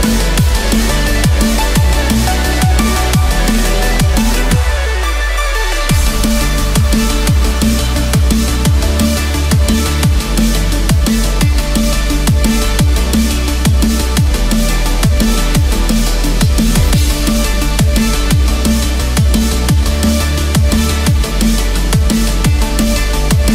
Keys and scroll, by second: 0.6 Return, 1.6 Escape, 3.1 ctrl+-, 3.4 ctrl+0, 5.8 ctrl+=, 11.7 ctrl+=, 17.6 ctrl+z, 21.8 ctrl+-, 22.1 ctrl+0.